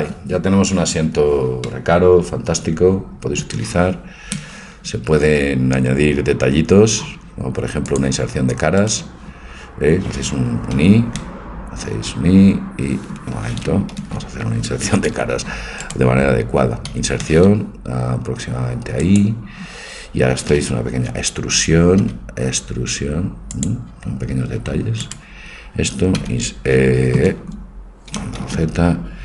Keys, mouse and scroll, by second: 1.7 middle click, 3.1 middle click, 5.0 Tab, 6.1 Tab, 6.6 middle click, 7.9-10.8 drag, 8.9-10.4 right drag, 10.8 i, 14.1 ctrl+z, 15.2 i, 15.9-18.1 drag, 16.9 i, 22.1 e, 25.1-26.7 right drag, 27.0 right click, 28.5 ctrl+z.